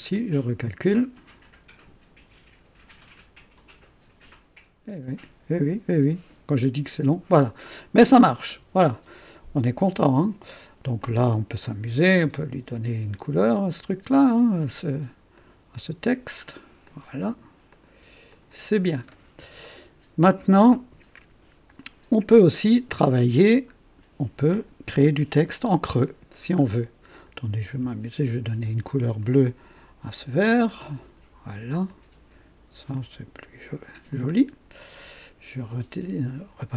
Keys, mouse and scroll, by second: 0.1 click, 7.4 click, 8.5-10.2 drag, 11.0 click, 12.0 ctrl+d, 13.2 click, 14.6 click, 15.4 click, 16.8 click, 17.7 click, 18.3 click, 19.2 scroll down 1, 19.6 right click, 23.7-24.0 scroll up 2, 26.1-26.5 scroll down 2, 27.1 click, 28.0 ctrl+d, 29.2 ctrl+click, 30.8 click, 31.9 click, 33.0-33.5 drag, 34.1 click, 34.8 click, 35.6 click.